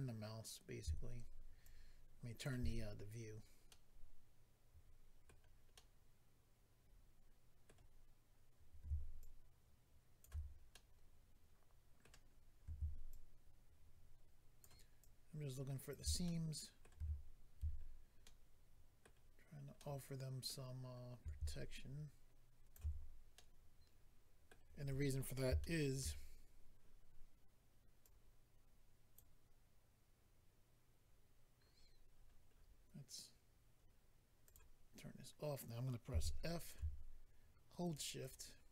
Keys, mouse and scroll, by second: 1.6 ctrl+click, 3.2-3.7 scroll down 3, 3.7 middle click, 5.7 middle click, 9.2 ctrl+click, 10.7 middle click, 12.3-12.6 scroll up 2, 13.1 ctrl+click, 16.2 middle click, 17.8-18.7 scroll down 2, 18.2 middle click, 19.0 scroll down 1, 19.8 middle click, 20.8-21.3 scroll up 3, 23.3 middle click, 25.6 shift+middle click, 28.0 click, 32.1-32.5 scroll down 4, 34.4 click, 34.5 click, 36.6 click, 36.6 f, 36.7 click, 37.8 shift+click, 37.9 shift+click, 38.2 shift+click.